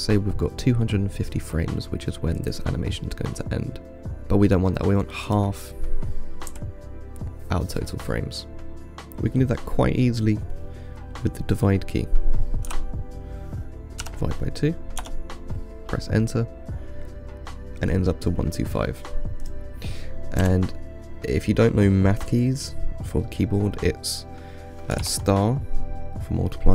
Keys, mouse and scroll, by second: 2.7-4.6 drag, 5.5-8.7 drag, 19.7-22.9 drag.